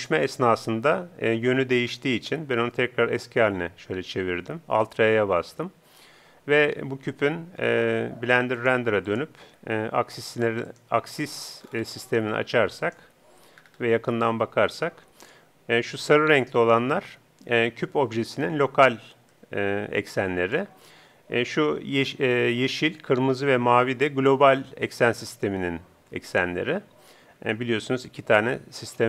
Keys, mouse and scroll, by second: 3.3 alt+r, 9.0-14.5 drag, 12.8-16.0 middle drag, 19.3-21.0 middle drag.